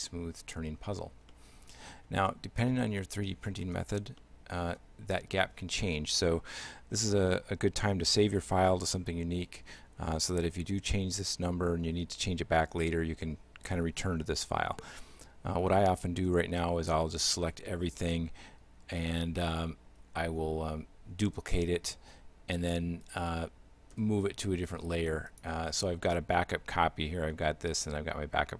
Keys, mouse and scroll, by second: 1.3 shift+middle click, 2.3 middle click, 3.0 shift+middle click, 4.0 scroll down 1, 4.2 middle click, 17.0 a, 17.3 a, 17.7 a, 20.2 shift+d, 24.0 m.